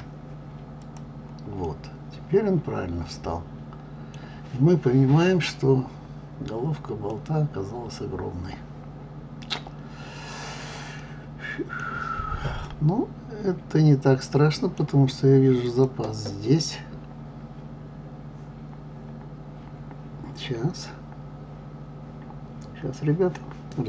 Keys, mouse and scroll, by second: 1.6-4.6 middle drag, 7.1-10.1 middle drag, 11.0-15.7 middle drag, 15.7 click.